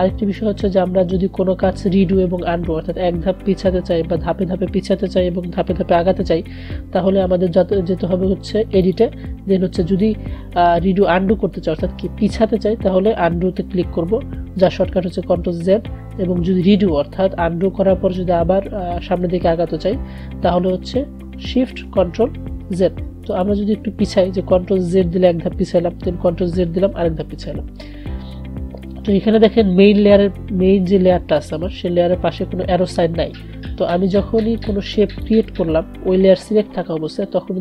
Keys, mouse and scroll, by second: 8.8 click, 23.5 click, 24.9 ctrl+z, 26.6 ctrl+z, 34.6-37.6 drag.